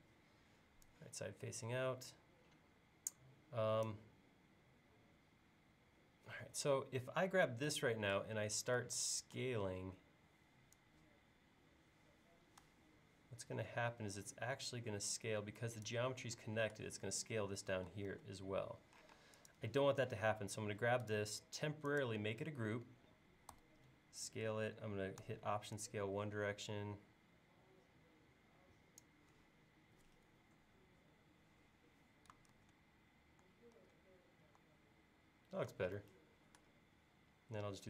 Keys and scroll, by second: 8.3 s, 18.2 super+z, 19.2 space, 23.6 s, 32.6 super+Tab, 33.8 super+Tab.